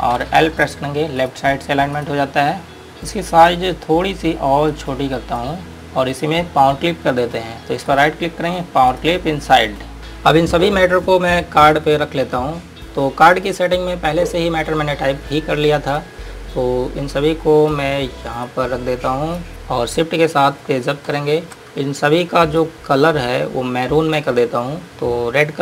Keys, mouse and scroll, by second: 1.5 click, 2.6 scroll down 1, 3.4 scroll up 1, 5.0 click, 8.2 right click, 16.2 click, 21.3 shift+Page_Up, 22.0 scroll up 1, 22.6 click, 24.9 scroll down 1.